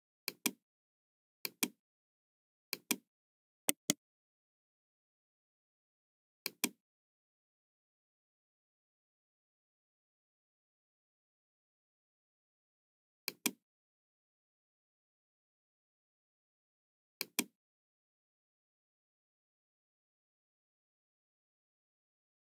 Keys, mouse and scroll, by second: 0.2 click, 1.3 click, 2.6 click, 3.6 right click, 6.4 click, 13.2 click, 17.1 click.